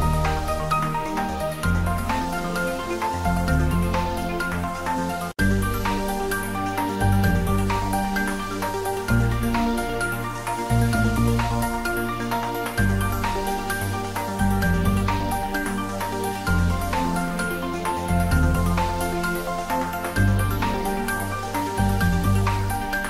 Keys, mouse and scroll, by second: 1.6 click, 2.3 g, 2.6 Down, 2.7 Left, 3.3 Right, 3.8 Left, 4.3 Return, 4.8 ctrl+s, 6.1 Tab, 6.7 middle click, 7.5 ctrl+s, 8.1 click, 8.5 ctrl+s, 9.6 click, 14.6 click, 17.4 click, 18.1 ctrl+s, 18.4-20.3 ctrl+middle drag, 20.8 ctrl+middle click, 20.9 ctrl+middle click, 22.0 ctrl+middle click, 22.9 shift+middle click.